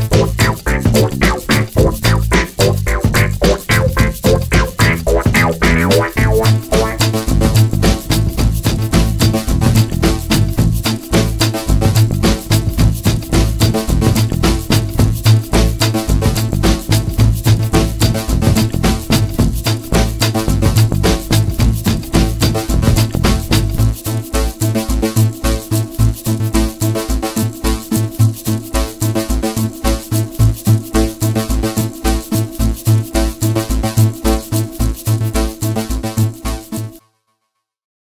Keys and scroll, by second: 18.7 d, 21.2 Page_Down.